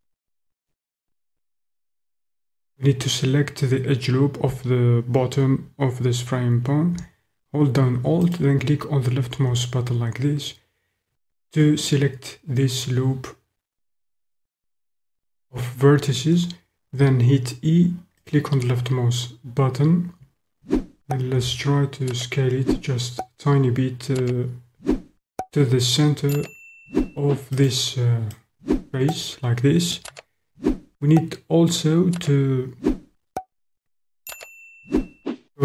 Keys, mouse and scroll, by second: 8.2 alt+click, 17.0 e, 18.3 click, 21.3 s, 27.5 click, 28.4 click.